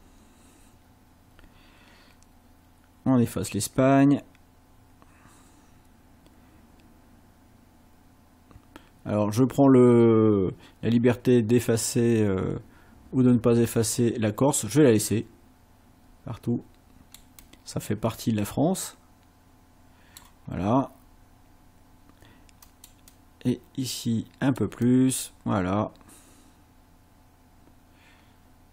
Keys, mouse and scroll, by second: 17.4-20.4 drag, 22.7 click, 23.1-24.8 drag.